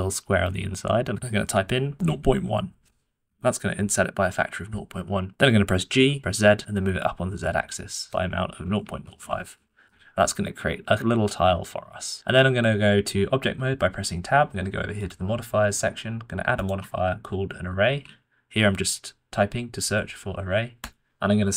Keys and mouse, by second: 6.2 g, 12.1 Tab, 16.6-20.9 drag, 17.8 r.